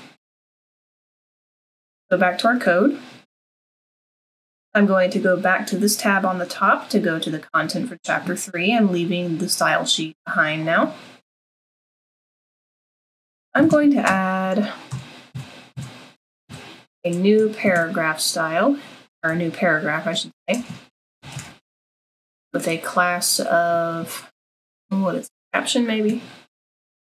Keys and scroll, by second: 14.0 Return, 14.9 Tab, 15.3 Tab, 15.7 Tab, 16.1 Tab, 16.3 Tab, 16.5 Tab, 17.7 <, 19.3 typing, 20.3-22.1 typing.